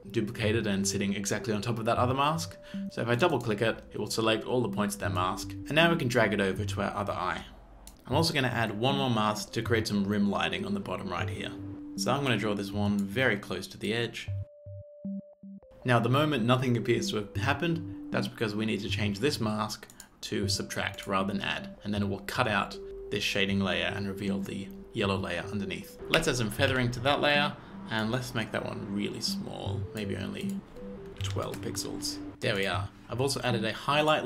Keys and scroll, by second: 15.4 z, 25.9 f, 26.2 f, 26.7 f, 31.2 KP_1, 31.3 KP_2, 31.5 KP_Enter.